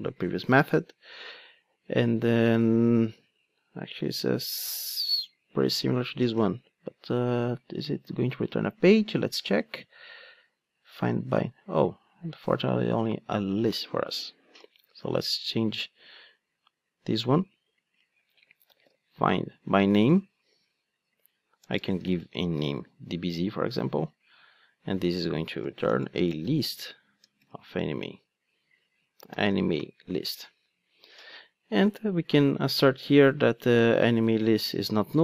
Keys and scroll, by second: 0.5 super+v, 13.7 ctrl+Tab, 20.1 Return, 33.8 super+c, 34.7 super+v.